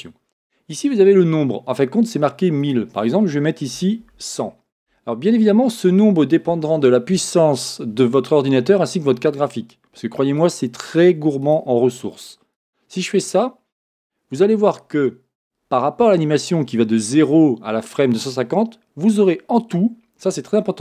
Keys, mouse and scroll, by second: 5.0 Return, 12.5-20.8 drag.